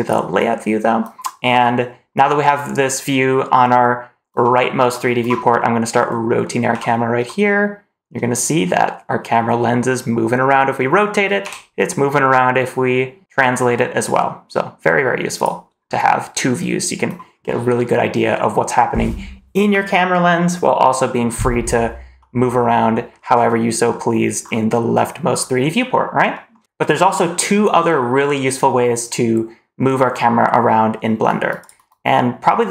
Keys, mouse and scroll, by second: 0.0 click, 1.5-3.1 scroll down 1, 6.2 middle click, 6.6 r, 22.1-23.0 middle drag, 23.2 scroll up 1, 23.5-24.1 middle drag, 24.3 scroll down 2, 25.2 scroll up 2, 26.2 middle drag.